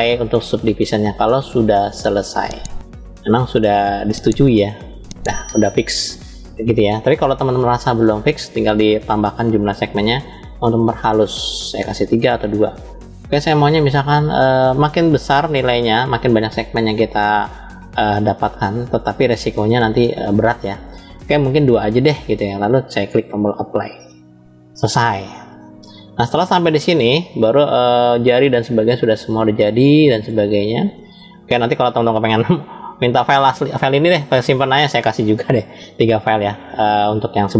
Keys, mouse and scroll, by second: 7.4 ctrl+z, 9.7 click, 11.7 click, 20.9 click, 23.0-24.1 drag, 24.7 scroll down 2, 25.5-26.3 middle drag, 25.5 scroll down 1, 26.8-30.1 middle drag, 30.5-31.4 shift+middle drag, 31.9 scroll down 2.